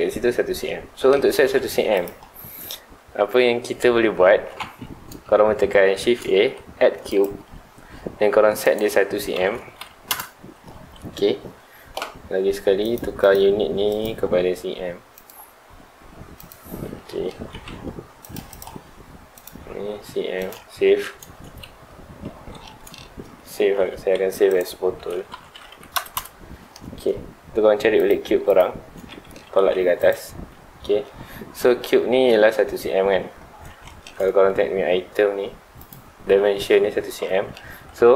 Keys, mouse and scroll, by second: 0.6-1.3 middle drag, 1.3 Tab, 1.7 3, 1.9 click, 2.4 scroll up 1, 4.4 scroll down 1, 4.6 Tab, 4.9-6.0 middle drag, 6.0 shift+a, 8.6-10.1 drag, 10.1 Return, 12.8 click, 13.2 click, 13.9 click, 15.1-17.0 drag, 17.0-17.5 middle drag, 17.5 g, 18.5 click, 19.3-20.8 drag, 20.8 ctrl+s, 22.4 Escape, 22.6-23.7 middle drag, 23.7 ctrl+s, 26.2 Return, 26.9 z, 28.0 click, 28.5 click, 29.1-29.5 middle drag, 29.5 g, 30.1 click, 30.3 z, 30.8-35.8 middle drag, 35.8 click, 37.2-37.8 middle drag, 37.8-38.1 scroll up 1.